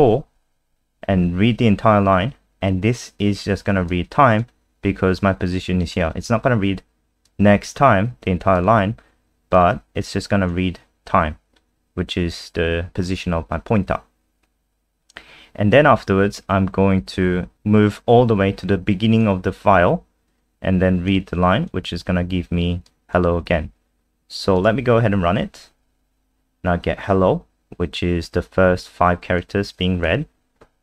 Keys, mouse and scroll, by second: 3.9 click, 14.7-15.6 scroll down 1, 17.5 click, 24.9 F5, 29.4 click.